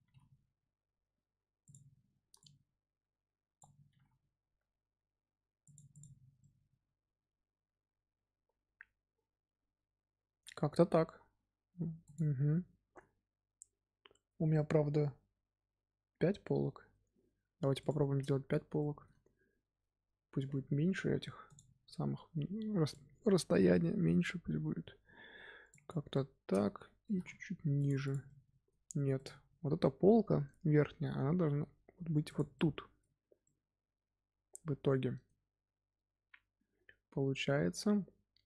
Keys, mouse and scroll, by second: 0.0 g, 2.3-3.8 drag, 3.8 g, 5.8 click, 6.2 scroll down 2, 6.3-9.5 middle drag, 17.7 click, 18.4-18.7 scroll up 2, 18.7-21.4 shift+middle drag, 21.4-25.8 drag, 26.1-27.0 middle drag, 27.0 g, 28.0 click, 28.2-29.1 middle drag, 29.1 click, 29.5-31.3 scroll up 2, 31.3 g, 32.5-36.4 middle drag.